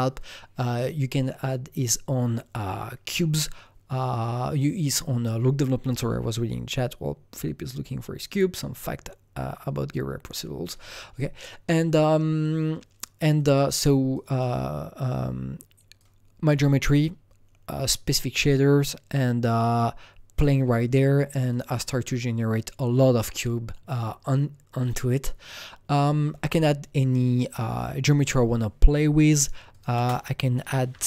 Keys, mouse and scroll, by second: 13.3 click, 14.1-15.9 drag, 15.9-24.1 drag, 24.8-27.4 drag, 29.1-30.6 drag, 29.9 ctrl+space, 30.6-31.0 typing, 30.9 click.